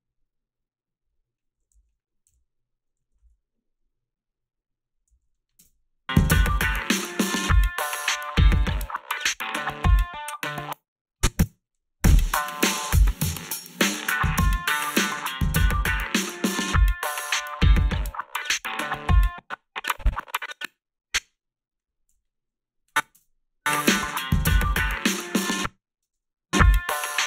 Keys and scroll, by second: 1.7 a, 2.3 f, 3.3 ctrl+r, 5.1 a, 5.6 space, 10.5 space, 11.4 space, 19.1 space, 22.1 g, 25.4 space, 26.0 space.